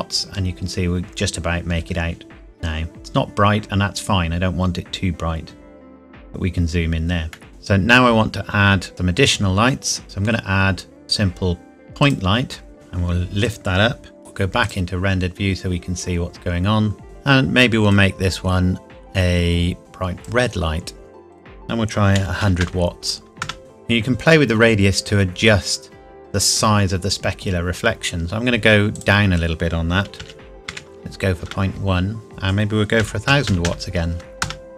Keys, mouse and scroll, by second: 2.9 scroll up 1, 7.3 middle click, 7.5-7.9 scroll down 1, 8.9-10.0 scroll down 1, 10.0 shift+a, 12.0 click, 12.7 g, 13.4 click, 14.2 scroll up 1, 14.6 click, 17.0 click, 22.1 KP_1, 22.4 KP_0, 23.4 KP_Enter, 23.7 scroll up 1, 28.9 click, 30.1 KP_Decimal, 30.6 KP_1, 31.4 KP_Enter, 32.3 click, 33.2 KP_0, 34.4 KP_Enter.